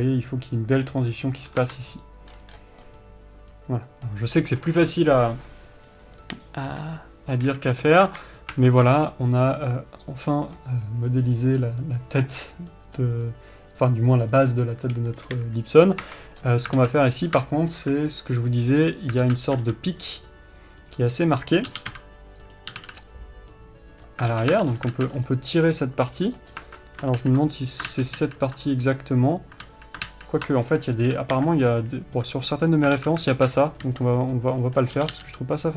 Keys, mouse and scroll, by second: 0.0 click, 0.2 g, 1.8 scroll down 1, 2.0 Tab, 2.7 scroll down 1, 3.2-4.7 middle drag, 4.7-5.8 scroll down 2, 5.8-7.9 scroll down 1, 7.9 KP_1, 8.9 Tab, 9.2-9.9 scroll up 4, 9.3 Tab, 9.9 middle click, 14.8-15.7 scroll down 2, 15.7 KP_3, 16.4 Tab, 16.8-17.1 scroll up 2, 17.1 alt+a, 17.4-17.9 scroll up 2, 17.9-23.1 shift+middle drag, 19.6 alt+z, 20.5 b, 23.1 g, 24.7 alt+a, 24.9 Tab, 25.1-25.7 scroll down 4, 25.3 alt+z, 25.7-28.1 middle drag, 26.9 scroll up 1, 27.0 Tab, 28.1 click, 28.9 ctrl+z, 29.4 click, 30.0 ctrl+z, 31.0-31.8 scroll down 1, 31.8 KP_3, 32.5-33.3 alt+scroll up 2, 33.3 alt+a, 33.7 alt+z, 34.0 scroll up 1, 34.6 b, 35.0-35.4 scroll up 1, 35.4 g.